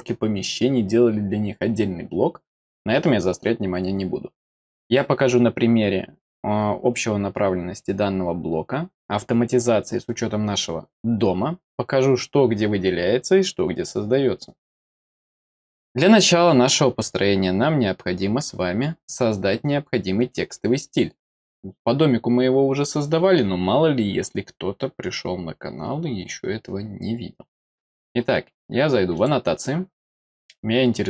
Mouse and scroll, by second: 29.1 click.